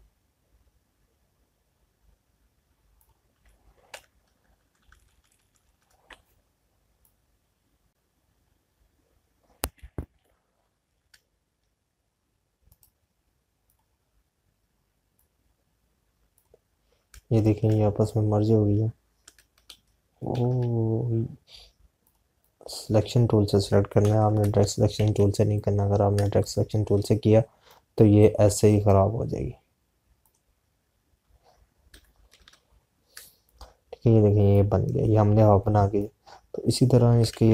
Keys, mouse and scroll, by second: 7.9 click, 11.1 ctrl+y, 13.5 right click, 14.9 click, 18.5 space, 19.1 click, 20.3 Right, 22.9 click, 24.9 Right, 25.8 z, 26.4 click, 27.1 space, 27.3 click, 27.6 space, 28.5 click, 32.7 Right, 34.0 space, 34.3 click, 34.5 space, 35.9 space, 36.8 click, 37.3 space.